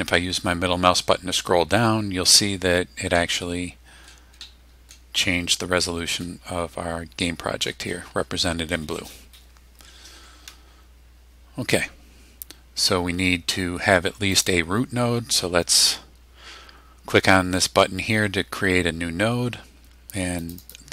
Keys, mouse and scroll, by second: 0.6-0.9 scroll down 1, 1.2-1.6 scroll down 1, 1.7 scroll down 2, 2.5 scroll up 2, 3.1-4.2 middle drag, 4.4 middle click, 10.7 scroll up 2, 14.3 click, 20.4 click.